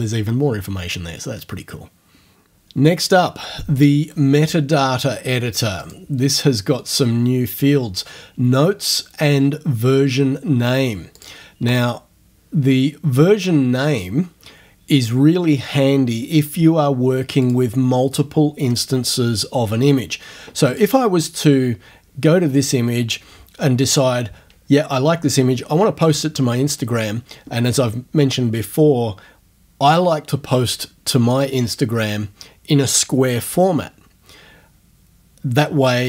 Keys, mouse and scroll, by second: 5.8 click, 11.2 click, 11.7 click, 17.4 click, 20.7 click.